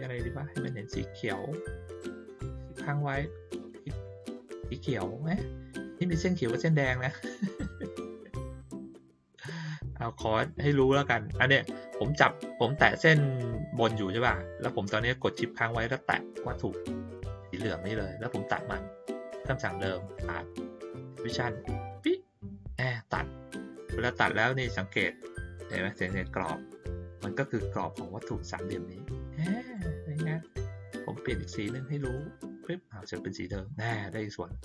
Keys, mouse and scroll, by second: 3.1 shift+click, 15.9 shift+click, 19.8 click, 21.5 click, 29.7 click, 30.4 click, 32.0 click, 33.2 click.